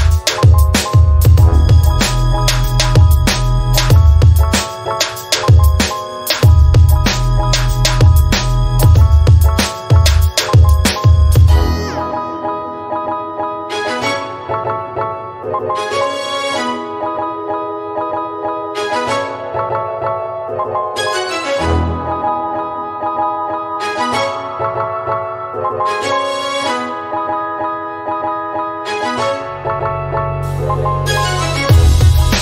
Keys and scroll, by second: 4.7-5.5 typing, 7.7-9.2 typing, 10.7 Return, 31.4 1.